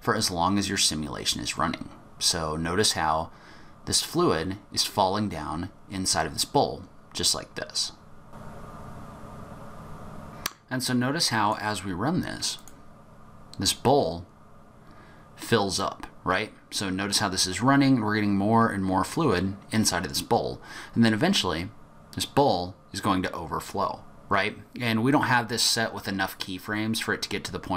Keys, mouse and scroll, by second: 8.7 middle click, 8.8 click, 8.8 scroll up 3, 12.5 click.